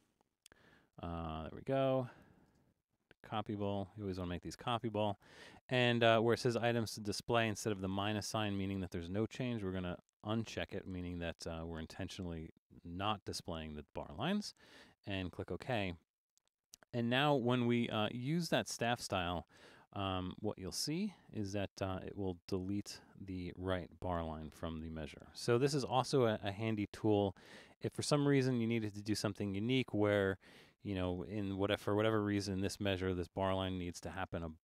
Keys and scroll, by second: 0.0-0.2 typing, 1.2 Left, 1.3 Left, 1.4 Left, 1.6 Left, 1.7 Left, 1.9 Left, 2.4 Left, 2.5 space.